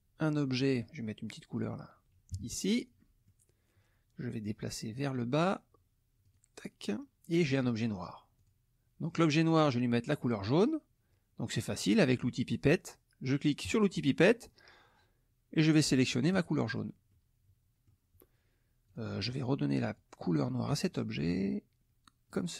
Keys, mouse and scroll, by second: 0.5 middle click, 1.6 click, 2.3 KP_Subtract, 3.0 click, 3.0 middle click, 4.9 click, 6.2 click, 7.6 click, 8.4 click, 9.1 middle click, 9.1-9.7 scroll down 2, 13.6 click, 16.3 click, 17.1 middle click, 18.9 click, 19.8 click, 22.3 click.